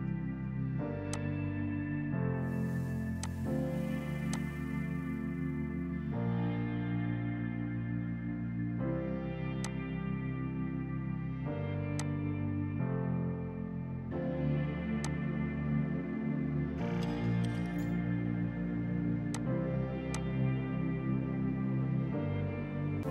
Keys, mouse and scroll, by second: 7.9 space, 8.5 F3, 9.7 click, 10.6 space, 12.0 click, 13.6 space, 14.4 F3, 14.8 F2, 15.0 click, 15.6 right click, 19.4 click, 19.6 right click, 20.2 click, 21.2 Escape, 21.8 F4, 23.0 click.